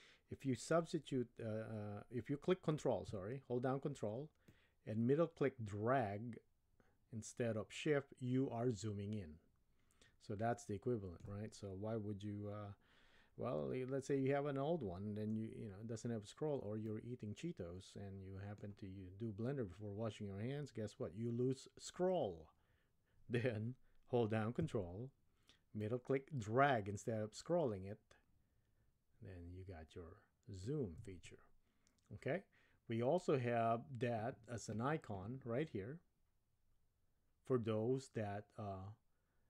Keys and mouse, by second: 4.5-11.3 ctrl+middle drag, 16.9-18.7 middle drag, 25.8-30.7 ctrl+middle drag.